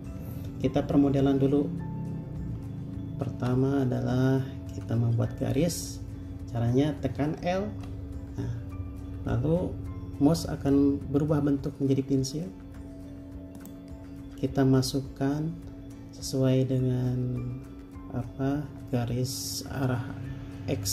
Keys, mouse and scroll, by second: 3.6 typing, 13.5-14.2 typing.